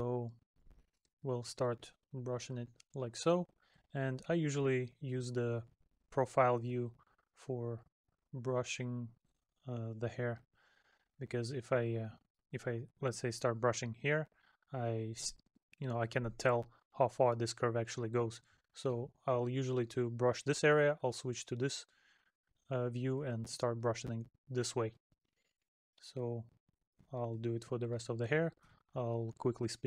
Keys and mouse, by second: 1.2 middle click, 8.3 middle click, 12.1 middle click, 14.9 middle click, 16.2 middle click, 18.0 middle click, 20.8 middle click, 25.4 middle click, 28.4 middle click.